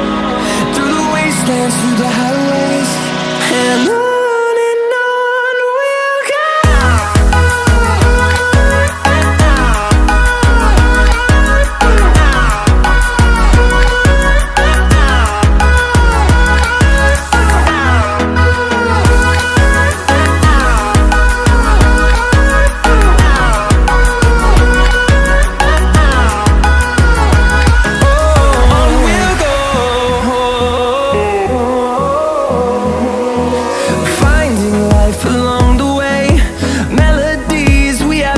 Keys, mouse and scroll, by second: 0.1 click, 1.4 click, 2.4-3.3 drag, 4.0 click, 4.8-7.1 drag, 12.9 click, 14.5 scroll down 2, 15.0 scroll down 2, 19.8 click, 21.3 click, 26.3 click, 27.2 click, 29.0 click, 30.0 click, 33.1 middle click, 33.1 scroll down 1, 33.9 click, 34.6-36.1 scroll up 5, 36.3 scroll down 1, 36.9 scroll up 1, 37.3-37.8 scroll down 4.